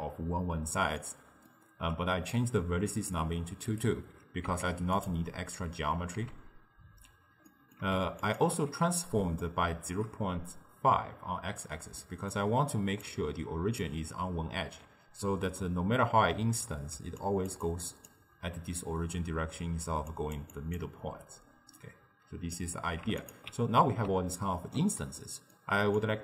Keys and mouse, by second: 2.4-3.8 drag, 4.5 z, 6.2 z, 7.5-8.3 middle drag, 8.3 alt+shift+click, 9.5-12.9 shift+middle drag, 12.9 d, 13.1 click, 13.9 d, 17.0 d, 17.3 drag, 17.5 d, 17.6 d, 17.7-18.2 drag, 18.2-18.5 d, 19.8 d, 20.2 drag, 20.4-21.1 d, 20.6 click, 20.8 d, 21.3-22.6 right drag, 22.6 d, 23.3 alt+shift+click, 24.3-26.0 ctrl+middle drag, 26.0 click.